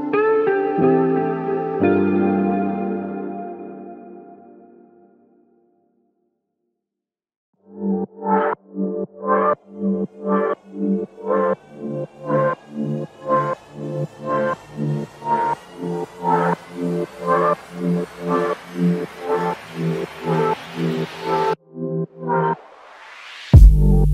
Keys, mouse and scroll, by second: 0.4 typing, 1.5 alt+click, 5.0 alt+click, 18.1 alt+click, 19.4 ctrl+z, 19.9 ctrl+z.